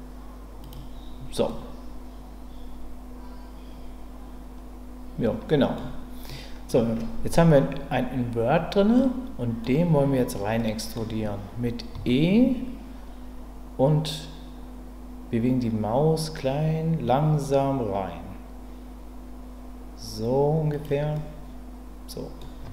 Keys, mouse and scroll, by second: 0.6 click, 1.6-5.7 middle drag, 6.2 middle click, 8.9 middle click, 10.6 middle click, 11.9 e, 20.7 click, 21.1-22.4 middle drag.